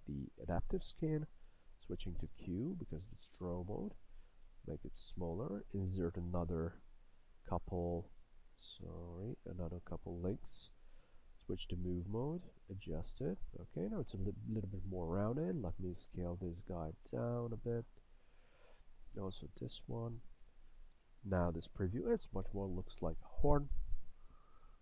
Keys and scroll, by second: 2.3 q, 4.5 s, 11.5 w, 15.8 e, 21.1 a.